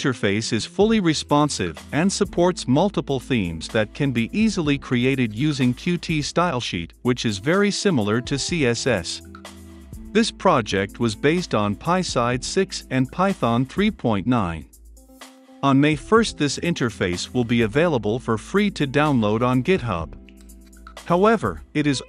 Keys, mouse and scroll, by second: 0.1-8.1 drag, 7.8-9.5 typing, 8.7 click, 9.3-22.0 drag.